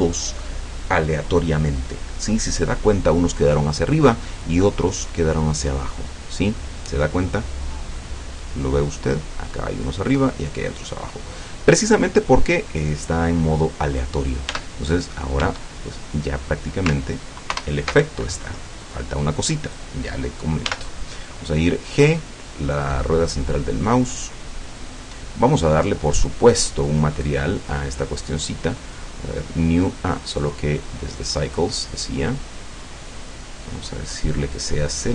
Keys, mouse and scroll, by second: 4.7-6.8 middle drag, 7.0-9.2 middle drag, 11.0-11.4 scroll up 1, 11.9-14.1 middle drag, 14.5 Tab, 15.0 scroll down 1, 15.8-16.3 shift+scroll up 3, 17.5 ctrl+alt+KP_0, 19.7 right click, 20.7 g, 22.0 middle click, 24.9 click, 27.2 right click, 28.2 click, 29.0 click, 30.2 click, 31.1 click, 32.3 click, 33.6 click, 34.6-35.1 drag.